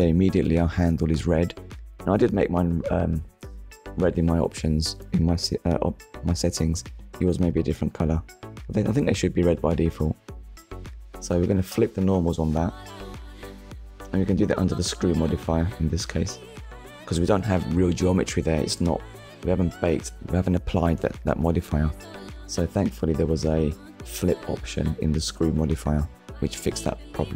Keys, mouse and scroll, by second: 0.2 scroll up 1, 3.2 Tab, 6.4 click, 8.9 click, 9.4-9.8 scroll down 1, 10.9 click, 19.0 click, 19.9 click, 21.1 scroll down 1, 21.7 shift+middle click, 23.0 click, 25.9 middle click.